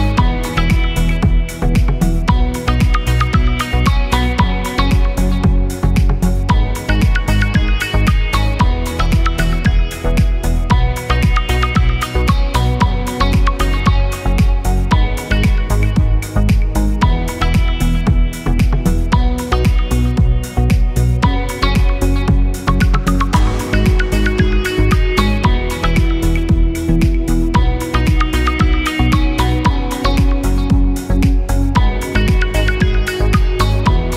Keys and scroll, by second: 20.0 0, 21.0 Return.